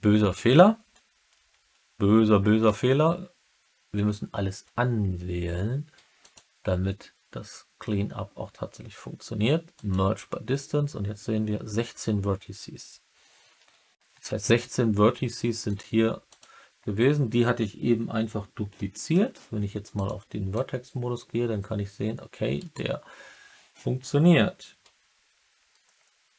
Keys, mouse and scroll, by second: 6.1-9.8 drag, 15.6 click, 19.0 1, 19.9 click, 20.5-22.5 drag, 22.5 middle click, 22.6 right click.